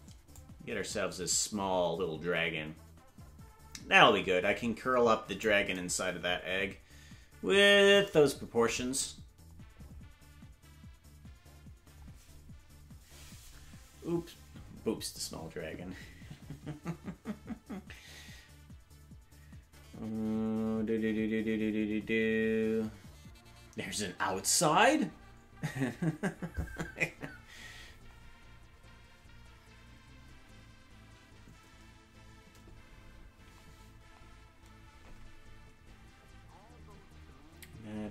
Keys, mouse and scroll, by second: 0.3-5.5 drag.